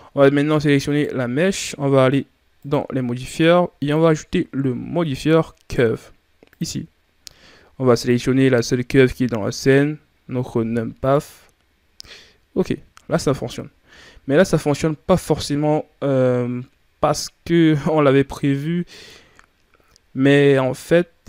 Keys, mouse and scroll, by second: 0.7 right click, 2.4-3.6 drag, 6.4 click, 7.7-10.8 drag, 12.6 scroll down 1, 13.3-13.7 shift+scroll up 4.